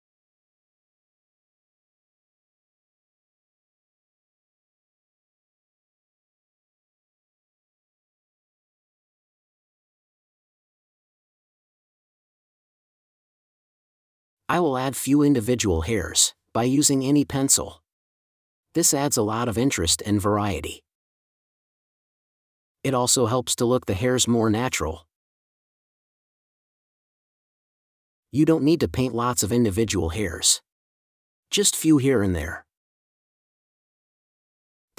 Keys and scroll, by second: 1.2 space, 7.8 space, 8.6 super+space, 13.7 super+z, 15.3 super+z, 15.5 space, 18.7 super+z, 20.3 super+z, 21.3 super+z, 21.5 space, 23.0 super+z, 23.1 super+z, 25.0 super+z, 26.0 super+z, 30.7 space, 34.2 space.